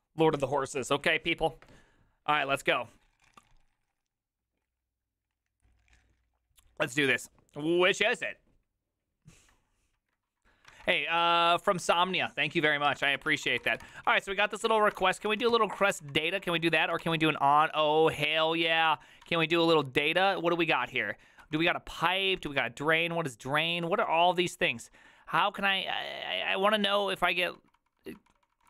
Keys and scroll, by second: 10.7 alt+{, 12.9 alt+{, 13.1-17.5 typing, 16.5 Return, 18.6-20.2 typing, 21.4 ctrl+n, 22.3-23.0 typing, 23.8 ctrl+n, 27.1 ctrl+n.